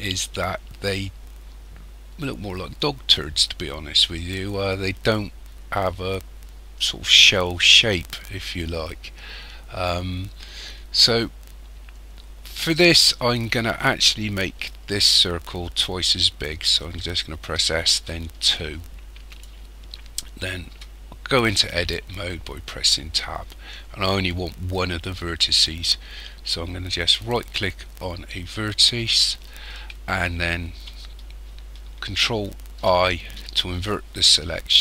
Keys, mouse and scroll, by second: 17.5 s, 20.7 Tab, 21.7-22.3 scroll up 3, 22.7-23.9 scroll up 3, 27.2 right click, 32.7 ctrl+i.